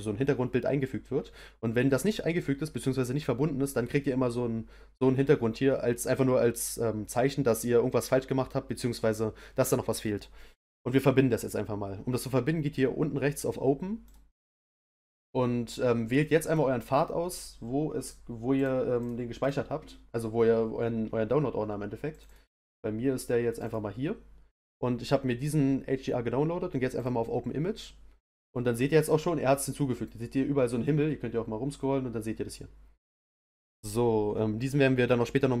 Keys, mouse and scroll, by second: 14.1-16.2 drag, 28.7-31.0 middle drag, 31.5 middle click, 32.7-35.6 scroll down 1.